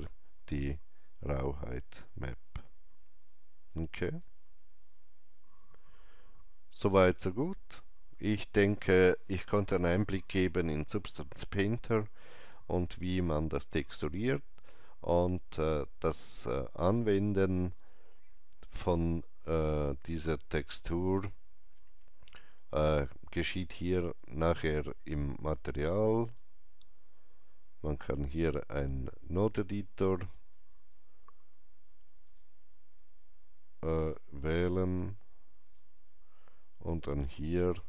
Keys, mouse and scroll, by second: 4.0 click, 6.9 click, 19.9 click, 23.7 click, 26.1 click, 26.1 click, 29.1-35.5 drag, 35.5 click.